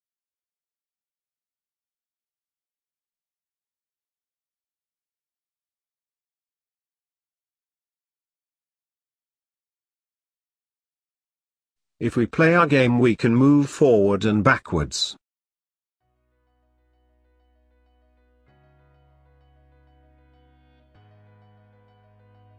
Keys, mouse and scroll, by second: 0.2 click, 3.5 click, 5.0 click, 6.2 ctrl+v, 8.5 click, 10.8-12.2 scroll down 4, 12.3 click, 13.0-16.9 drag.